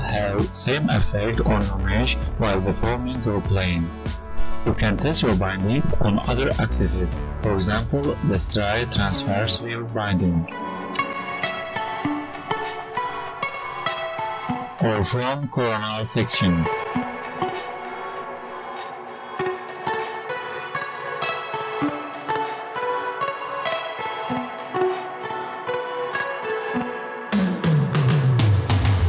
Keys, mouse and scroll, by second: 0.5 r, 3.6 click, 4.4 click, 4.6 click, 5.2 click, 5.7 g, 6.5 Tab, 6.7 click, 7.2 g, 9.5 Tab, 10.1-10.4 ctrl+z, 10.6 ctrl+z, 10.7 ctrl+z, 11.0 ctrl+z, 11.3 ctrl+z.